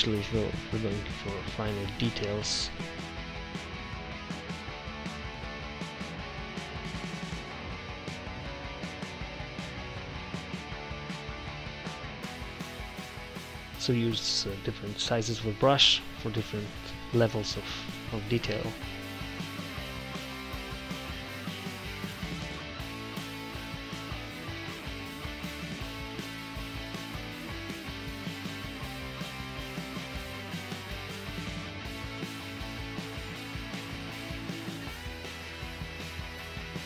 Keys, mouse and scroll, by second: 1.7 ctrl+z, 2.2 i, 4.8 click, 5.6-7.0 middle drag, 7.0 click, 7.8 d, 8.0 d, 8.2 d, 9.4 click, 10.6 click, 12.2 f, 14.0 click, 15.1 c, 15.6 v, 15.8 click, 16.0 c, 16.4 click, 17.9 middle click, 18.2 click, 19.2 click, 19.9 f, 20.2 click, 21.0 ctrl+z, 21.1 ctrl+z, 21.2 ctrl+z, 21.4 ctrl+z, 21.8 click, 22.6-27.3 drag, 27.3 ctrl+z, 27.5 f, 29.5 f, 32.6-34.5 drag, 32.9 f, 34.5-36.8 drag.